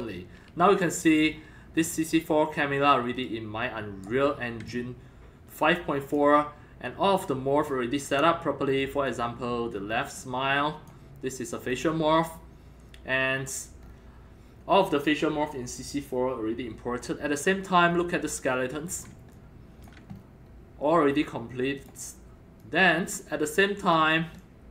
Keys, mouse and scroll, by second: 1.3 scroll down 5, 1.5 scroll up 4, 1.8-3.2 scroll down 3, 3.2 middle click, 3.2-4.6 right drag, 4.7-6.1 alt+drag, 9.0-10.9 drag, 10.9 click, 11.7 click, 13.3-13.8 scroll down 4, 13.9 scroll up 4, 14.8-17.5 scroll down 2, 17.5-19.0 alt+middle drag, 19.3 alt+click, 20.1 scroll up 2, 20.4 scroll down 1, 21.8 click, 22.6-24.7 drag.